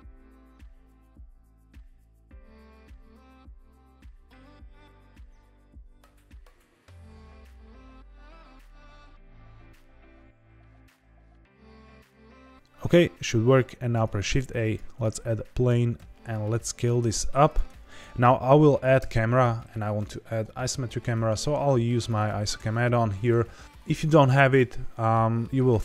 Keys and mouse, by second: 0.0-2.0 typing, 0.0 click, 0.9 click, 1.0 alt+d, 1.8 click, 1.9 alt+d, 2.5 click, 2.7 click, 2.9 alt+d, 3.4-7.1 typing, 3.6 click, 4.3 click, 5.1 click, 5.3 click, 5.8 click, 6.0 alt+d, 6.4 click, 6.8 click, 7.1 click, 7.7 click, 7.8 middle click, 8.3 r, 8.6 click, 8.6 middle click, 8.8 g, 8.9 shift+z, 9.6 click, 9.7-10.0 middle drag, 10.1 g, 10.6 click, 10.7 middle drag, 11.1 KP_1, 11.4 g, 11.4 z, 11.7 click, 11.9 middle click, 13.7 shift+a, 15.9 s, 17.4 click, 18.9 n, 22.0 click.